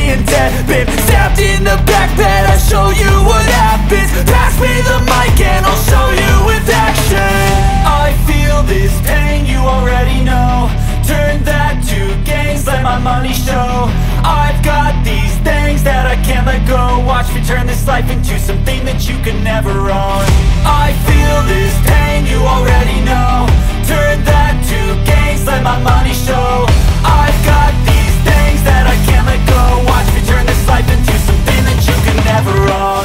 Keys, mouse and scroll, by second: 3.1 ctrl+q, 4.2 click, 5.6 scroll up 1, 6.2 click, 9.7 scroll down 1, 10.5-10.8 scroll up 1, 10.8 click, 12.4 scroll down 1, 13.2 click, 16.4 click, 26.6-30.8 drag.